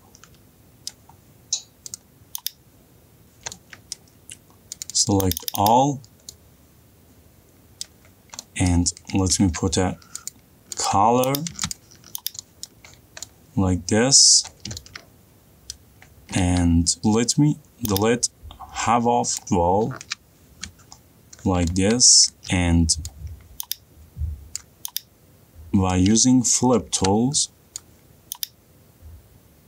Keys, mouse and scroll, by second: 1.4 middle click, 2.4 click, 3.8 middle click, 4.4 middle click, 5.3 click, 5.5 click, 5.7 click, 8.3 middle click, 8.6 middle click, 8.6 middle click, 9.2 middle click, 9.8 b, 10.6 middle click, 10.6 click, 11.4 click, 11.8 middle click, 12.3 click, 12.7 middle click, 13.0 middle click, 13.2-14.7 middle click, 13.4-14.0 scroll, 14.8 middle click, 15.1 middle click, 16.2 middle click, 16.6 middle click, 16.7 middle click, 17.0 ctrl+z, 17.0 middle click, 17.5 middle click, 19.5 click, 20.4 Delete, 21.5 middle click, 21.7 middle click, 22.0-22.7 scroll, 22.7 middle click, 25.1 click, 27.3 ctrl+f.